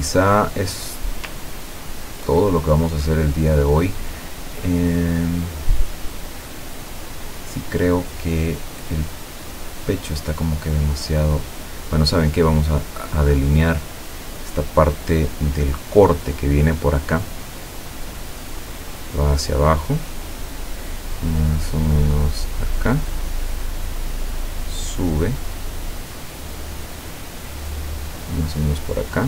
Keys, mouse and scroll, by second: 1.5 ctrl+scroll up 2, 2.6-3.0 ctrl+scroll up 3, 3.2 scroll down 2, 13.3 click, 18.4 click, 23.4-24.8 drag.